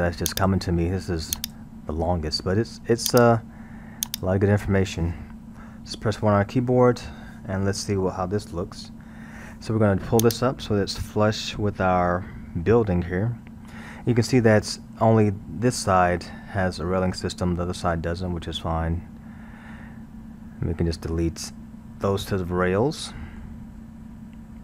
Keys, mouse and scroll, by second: 0.3 click, 1.4 click, 3.1 click, 4.1 click, 6.3 KP_1, 7.2-8.4 middle drag, 8.4-9.1 scroll, 9.1-10.2 middle drag, 10.2 click, 18.9-21.2 middle drag, 21.2-22.3 scroll, 22.3-24.6 middle drag.